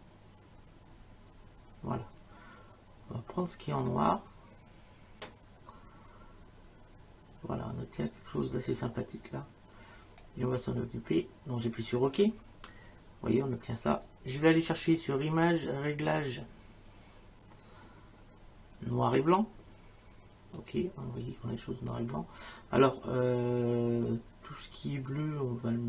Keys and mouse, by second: 11.7 click, 14.9 click, 19.1 click, 20.6 click, 25.1 click.